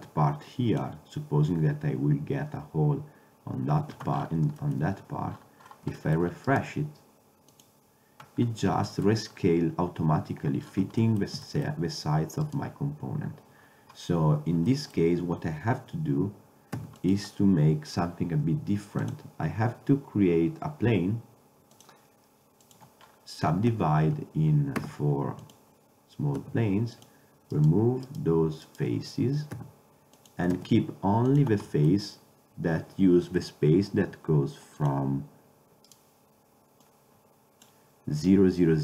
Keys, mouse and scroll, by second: 4.0 Tab, 7.6 middle click, 8.5-9.3 middle drag, 9.4 middle click, 10.7 middle click, 12.5-14.8 right drag, 16.4 click, 16.8 x, 19.1-20.9 drag, 20.9-21.8 middle drag, 21.8-22.8 drag, 23.1-23.6 drag, 23.8 Tab, 25.6 w, 26.5 ctrl+Tab, 29.6 x, 30.6 ctrl+Tab, 34.9-36.0 drag, 36.7 click, 37.7-38.8 drag.